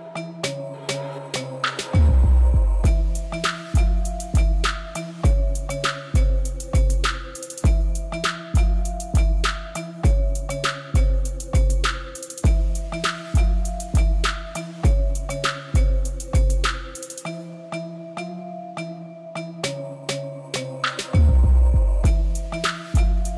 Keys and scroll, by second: 2.9 r, 3.3 z, 4.6 s, 5.4 g, 7.2 s, 14.7 e, 15.9 Return, 17.3 ., 17.4 9, 17.6 Return, 19.6 Tab.